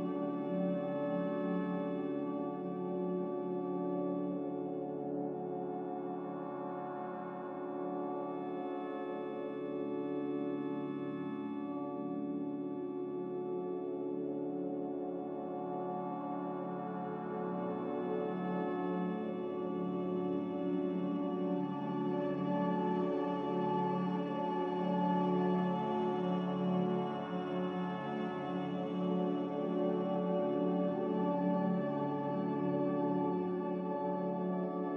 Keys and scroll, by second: 11.1 m, 16.7 b, 22.1 m, 25.6 b.